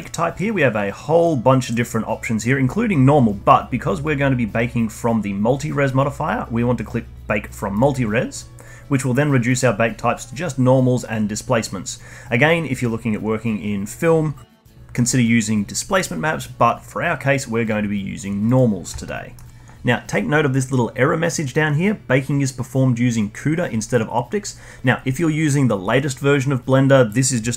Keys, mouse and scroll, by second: 7.7 drag, 9.5-12.6 drag, 19.0 alt+middle click.